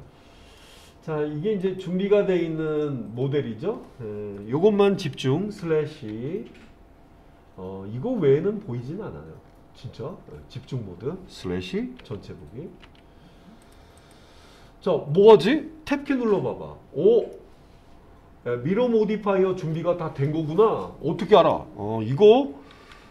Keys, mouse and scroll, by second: 0.0 middle click, 1.6 click, 6.1 /, 8.3-9.2 scroll down 4, 9.5-11.3 scroll up 5, 12.0 /, 12.9 /, 13.6 click, 14.0 click, 16.3 Tab, 17.4-19.8 middle drag, 20.3-21.5 middle drag.